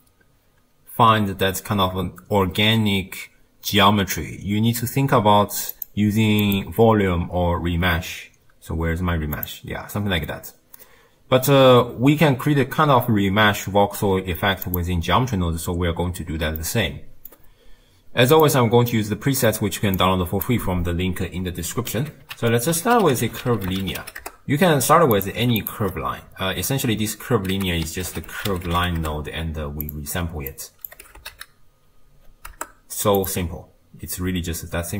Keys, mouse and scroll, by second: 1.9-6.4 scroll up 2, 14.8-16.7 drag, 16.7-20.0 middle drag, 20.0 click, 22.0 ctrl+x, 24.2 ctrl+a, 25.6-29.0 alt+shift+drag, 29.0 ctrl+a, 30.9 click.